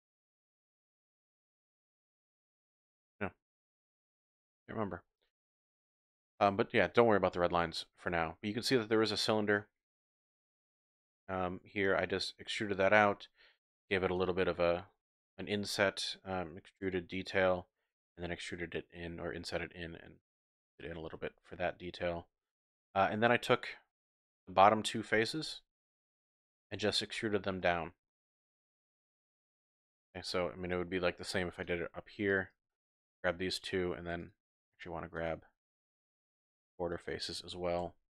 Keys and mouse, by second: 0.0-3.2 drag, 3.9 click, 6.1 middle click, 7.3 middle click, 8.2-9.5 middle drag, 10.4 shift+click, 12.1 middle click, 14.1 alt+click, 14.9 click, 16.9 click, 17.9 click, 20.7 click, 21.1 Tab, 21.1 typing, 22.2 click, 22.5 Tab, 22.8-24.3 drag, 26.0 click, 26.8 shift+click, 27.6 shift+click, 27.6 typing, 28.8 shift+click, 29.4 click, 29.4 typing, 29.9 shift+click, 30.4 shift+click, 31.3-32.4 typing, 31.7 click, 32.7 middle click, 35.2 shift+click, 36.9 shift+click, 37.8 KP_1.